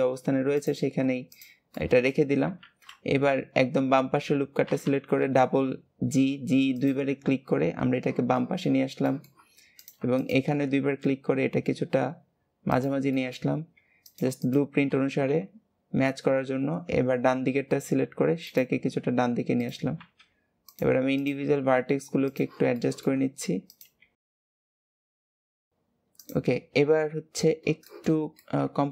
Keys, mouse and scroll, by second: 0.5 click, 1.2 shift+click, 1.7 shift+middle click, 2.5 alt+z, 3.1-4.6 scroll up 1, 4.6 g, 9.0 shift+middle click, 9.7 click, 10.1 shift+click, 10.6 g, 13.1 shift+middle click, 14.0 click, 14.4 shift+click, 15.0 g, 18.8 scroll up 2, 19.5 click, 21.1 click, 22.7 shift+middle click, 23.6 click, 24.5 click, 24.6 g, 25.0 shift+middle click, 25.4 click, 26.2 click, 26.5-27.0 scroll down 2, 27.8-28.9 shift+middle drag.